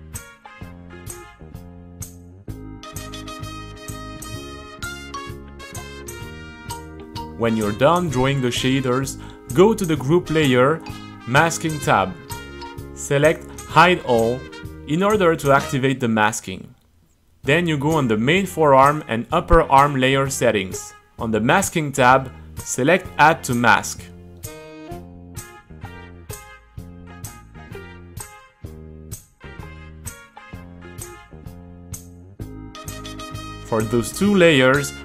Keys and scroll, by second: 0.0-0.2 typing, 0.1 Return, 0.8 super+z, 1.8-4.9 typing, 4.9 super+r.